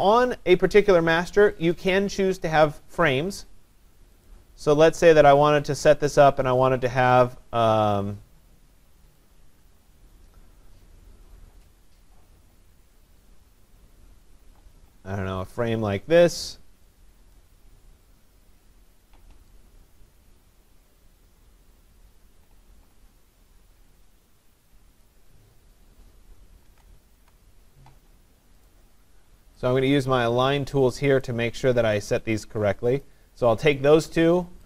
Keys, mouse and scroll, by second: 1.6 click, 1.9 click, 4.3 click, 15.5 click, 17.2 click, 17.4 click, 25.1 click, 26.7 ctrl+c, 27.1 ctrl+v, 28.7 click, 31.2 click, 32.1 click, 33.1 click.